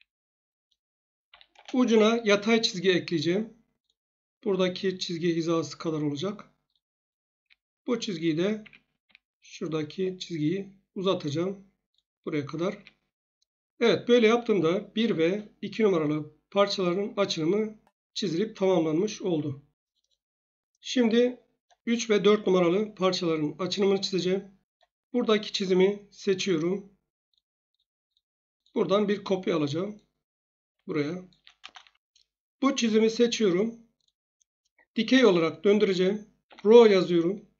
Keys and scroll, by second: 1.2 1, 1.5 Return, 7.4 Escape, 8.6 Escape, 9.0 Escape, 12.8 Escape, 36.4-36.7 typing.